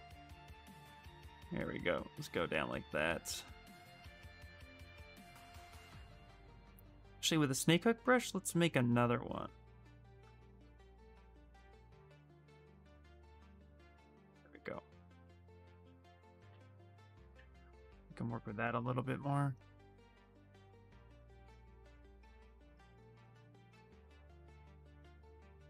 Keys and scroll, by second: 2.7 s, 7.1 s, 17.8 s, 23.7 s.